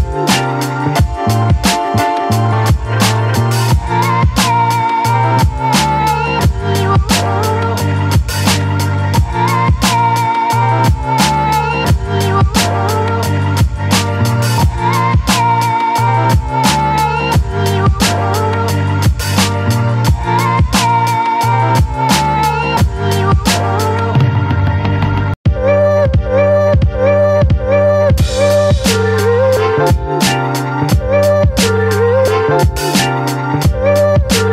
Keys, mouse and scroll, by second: 1.3 click, 2.8 click, 4.5 click, 6.3-8.5 drag, 8.8-12.8 drag, 12.9 right click, 13.9 click, 16.8 click.